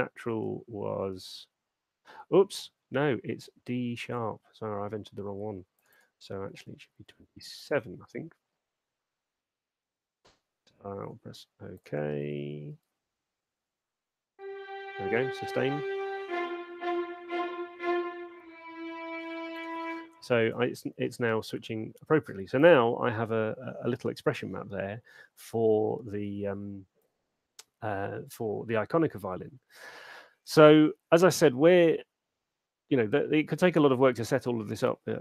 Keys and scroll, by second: 7.4 7, 12.6 super+2, 13.3 alt+shift+space, 20.0 space.